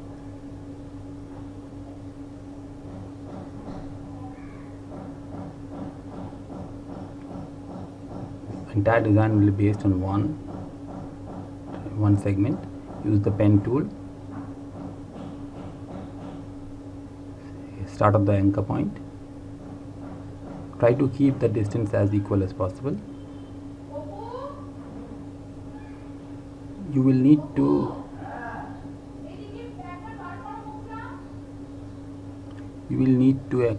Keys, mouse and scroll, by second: 0.5 click, 2.5 Delete, 3.9 click, 6.8 Delete, 12.1 click, 18.6 click, 25.5 click.